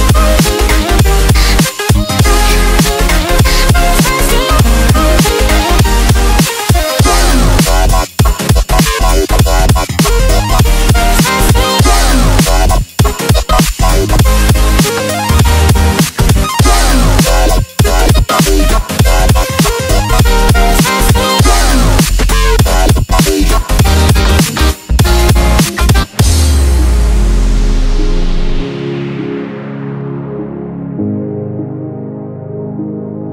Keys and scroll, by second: 22.3 g, 28.3 v, 31.9 super+c, 32.7 super+f.